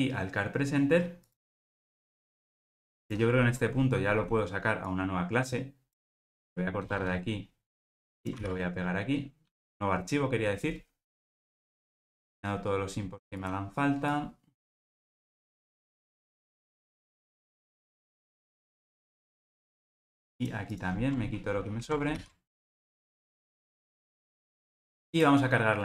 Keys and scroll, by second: 6.4 super+x, 15.1 super+c, 18.3 ctrl+alt+o.